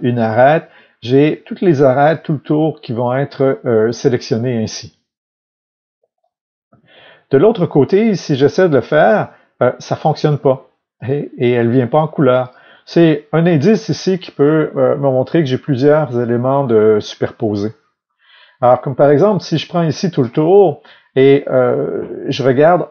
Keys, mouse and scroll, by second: 3.0 click, 3.7-8.9 middle drag, 6.6 alt+a, 8.9 alt+click, 10.9 alt+click, 12.4 alt+click, 13.6 alt+click, 16.5 alt+middle click, 17.5-19.4 middle drag, 19.4 alt+click.